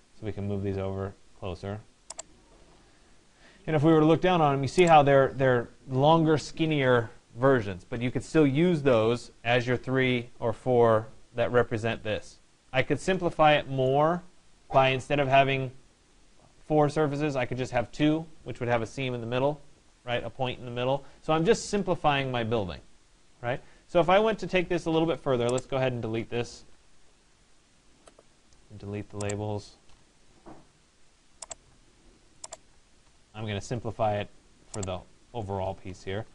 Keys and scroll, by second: 2.2 Escape, 26.4 Delete.